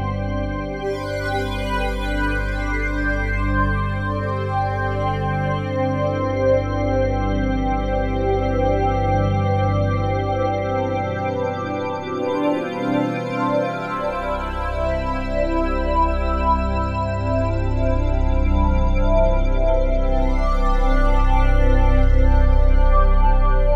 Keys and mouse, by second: 0.2 ctrl+z, 1.0-4.6 drag, 4.4 1, 7.0-7.9 typing, 8.4-9.5 drag, 9.6-10.7 ctrl+alt+drag, 11.1 ctrl+alt+shift+click, 11.7 ctrl+alt+shift+click, 12.5-16.3 alt+shift+drag, 12.5 typing, 16.3-17.6 typing, 21.0 shift+click, 21.9 typing.